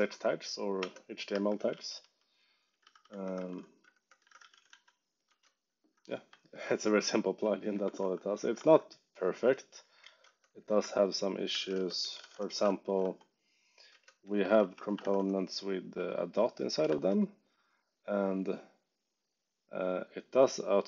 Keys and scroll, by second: 0.0-4.9 typing, 0.7 Return, 5.2 Return, 6.2 ↻, 7.8 ctrl+shift+Tab, 8.5 ctrl+Tab, 9.1-15.4 typing, 10.2 Return, 13.8 Return, 16.8 shift+<.